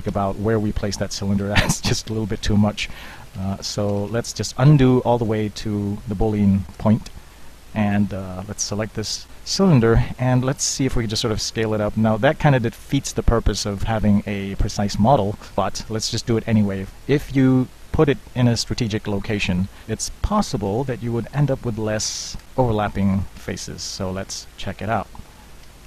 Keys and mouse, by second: 0.1 Tab, 0.8 Tab, 1.4 ctrl+z, 1.9 ctrl+z, 2.4 Tab, 2.8 ctrl+z, 3.0-3.4 ctrl+z, 3.6 ctrl+z, 4.0 ctrl+z, 4.1 ctrl+z, 4.9 ctrl+z, 6.7 KP_3, 6.8 KP_1, 7.4 KP_3, 8.7 click, 9.3 z, 11.5 s, 17.3 Tab, 18.1 Tab, 22.2 Delete, 23.4 Tab, 24.3 ctrl+Tab, 25.7 a.